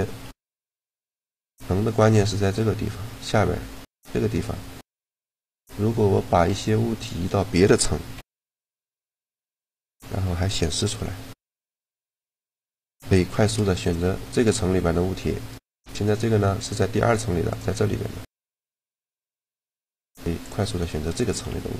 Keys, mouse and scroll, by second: 0.0 g, 1.6-3.2 middle drag, 5.4 middle click, 5.8 a, 6.2 b, 7.8 m, 11.7 a, 12.0-13.0 right drag, 13.0 click, 13.1 shift+g, 14.7 g, 15.7-20.4 drag, 17.3 right click, 19.7 shift+g, 21.2 g.